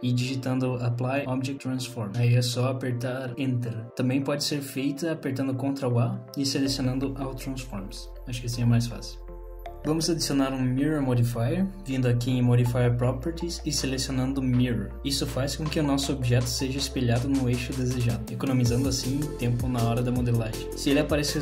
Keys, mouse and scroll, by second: 4.0 click, 4.9 ctrl+a, 9.8 Tab, 9.8 middle click, 9.8-11.3 scroll down 3, 12.5 click, 13.5 click, 14.5 click, 17.5 middle click, 19.9-20.7 scroll up 5, 20.7 middle click.